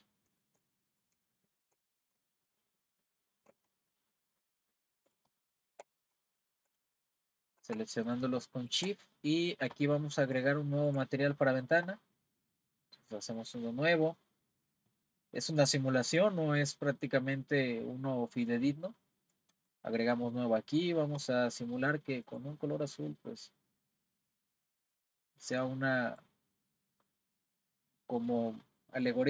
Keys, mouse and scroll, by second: 0.3 shift+click, 1.3 shift+click, 2.4 shift+click, 3.0 shift+click, 3.8 shift+click, 4.1 shift+click, 4.4 shift+click, 4.7 shift+click, 5.3 shift+click, 5.6 shift+click, 6.3 shift+click, 6.9 shift+click, 7.3 shift+click, 8.1 shift+click, 8.6 shift+click, 9.1-13.4 middle drag, 13.4-16.5 drag, 19.5-20.8 drag.